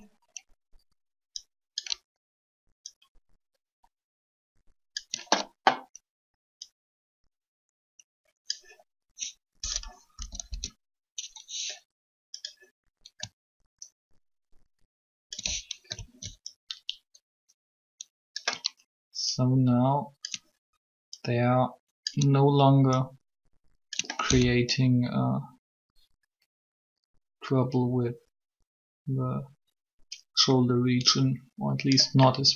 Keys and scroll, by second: 10.1 Up, 10.3 Up.